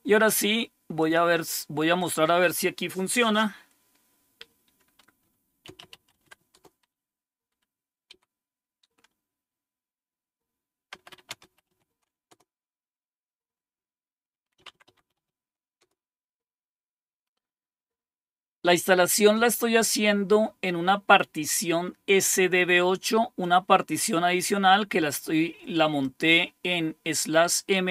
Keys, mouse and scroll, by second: 1.0 click, 2.0 click, 5.4-6.8 typing, 7.5 Up, 8.1 typing, 10.7-12.3 typing, 14.3-15.8 typing, 23.4-26.2 drag.